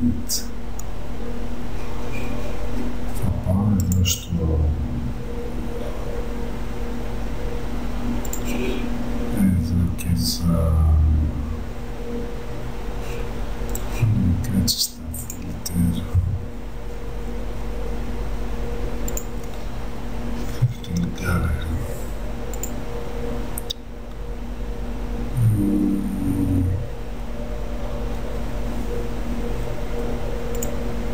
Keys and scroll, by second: 0.4 alt+Delete.